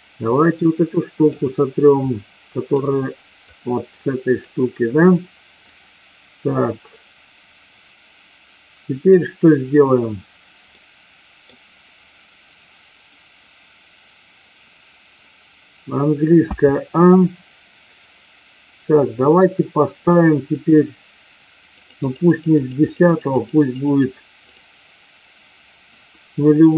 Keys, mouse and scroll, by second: 0.4 click, 1.9 click, 3.5 click, 5.7-9.1 drag, 10.8 middle click, 16.5 a, 22.1 click, 22.9 click, 23.4 click, 24.5 click.